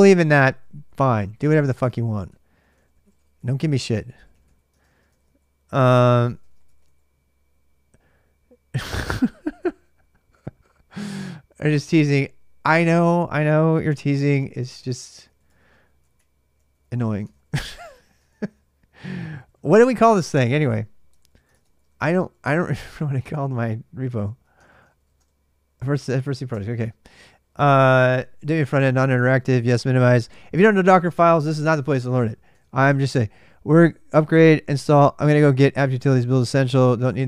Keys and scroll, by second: 0.4-7.1 typing, 13.3 ctrl+a, 13.7-17.6 typing, 18.1 ctrl+a, 18.1 Return, 18.3 ctrl+a, 21.2-23.4 typing, 24.4 ctrl+[, 24.7 shift+z, 24.8 shift+z, 25.6 ctrl+[, 25.8 k, 26.3 Return, 26.9 ctrl+[, 26.9 ctrl+j, 27.1 k, 27.3 k, 28.2 ctrl+[, 28.2 ctrl+j, 28.5 typing, 29.7-31.0 typing, 32.3-34.3 typing, 36.9-37.2 typing.